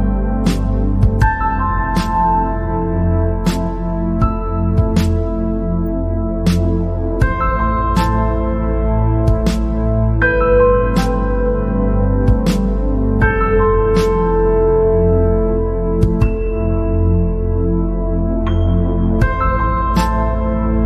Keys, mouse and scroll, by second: 0.2 scroll down 2, 1.6 alt+click, 3.0 alt+click, 5.1 ctrl+b, 7.5 Escape, 7.7 scroll down 5, 8.2 scroll up 2, 8.6 scroll down 1, 8.6-9.7 middle drag, 9.7-10.8 drag, 11.3-11.6 scroll up 4, 12.0 scroll up 1, 12.7 scroll up 1, 12.9 middle click, 13.8 scroll up 2, 15.1-17.4 drag, 18.1 click, 19.9 ctrl+b.